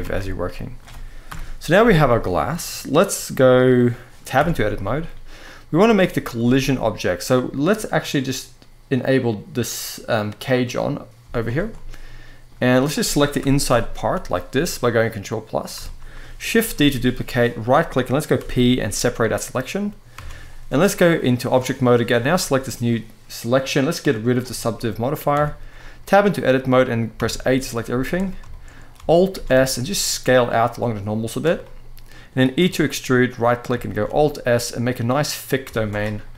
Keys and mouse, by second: 0.2 middle drag, 1.0 KP_1, 2.0-2.3 shift+middle drag, 3.5-3.9 middle drag, 4.1 Tab, 4.5 middle click, 5.1 middle click, 6.1 z, 7.0 middle click, 10.9 z, 11.4-12.2 middle drag, 14.4-15.3 middle drag, 15.6-15.9 shift+middle drag, 16.5 shift+d, 18.1 p, 20.0 Tab, 22.1-22.6 middle drag, 23.9 click, 24.7 middle click, 25.0 Tab, 25.4 middle click, 26.9 a, 27.1-27.6 middle drag, 27.6 z, 28.2 shift+middle click, 29.0 alt+s, 31.0 shift+click, 31.3 middle click, 32.3 e, 33.0 right click, 33.6 alt+s, 35.2 click, 35.9 z, 36.0 middle click.